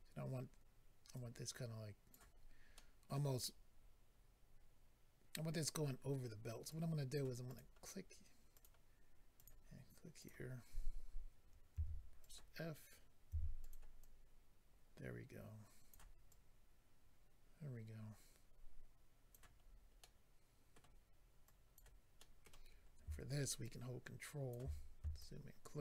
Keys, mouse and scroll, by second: 1.1 click, 2.4-2.8 scroll down 2, 2.8 middle click, 6.7 click, 7.5 click, 7.5 click, 8.5 click, 8.6 click, 9.3 click, 9.5 click, 10.2 click, 10.3 click, 10.8 scroll up 2, 11.7 f, 12.2 click, 13.3 f, 13.6 click, 13.7 click, 14.0 click, 16.3 click, 19.6-20.5 scroll down 3, 20.0 middle click, 21.4 click, 22.2 middle click, 22.7-23.0 scroll up 2, 23.6 ctrl+click, 24.7 scroll up 3, 25.1 ctrl+click.